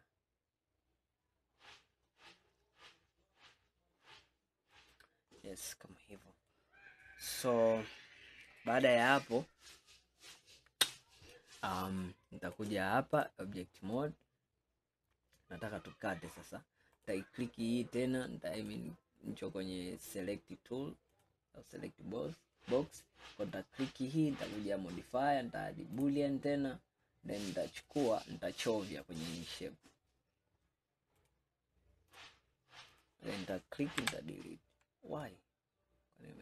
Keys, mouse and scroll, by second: 5.5-6.6 scroll down 2, 6.6-9.6 middle drag, 12.7-14.1 drag, 14.1-17.1 middle drag, 17.1 drag, 18.6-21.3 drag, 26.1-27.6 drag, 27.8 click, 31.3-33.1 drag, 34.1 Delete, 35.3-36.4 middle drag.